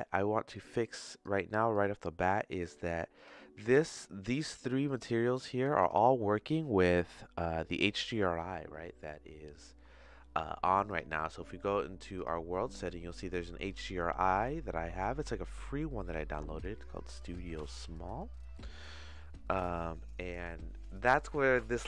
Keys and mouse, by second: 0.8 click, 1.8 click, 3.1 click, 4.4 click, 4.8 click, 10.9-12.2 drag, 12.9 middle click, 13.9 middle click, 14.9 middle click, 16.6 click.